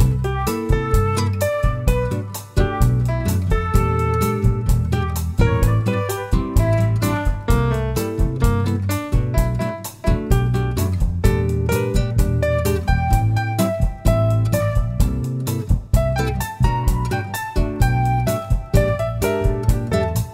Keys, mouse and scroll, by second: 0.8 click, 6.7 click, 9.3 scroll down 1, 10.4-12.2 middle drag, 10.8-12.2 scroll down 2, 12.2 click, 14.0 click, 15.1 click, 18.8 click, 20.2 click.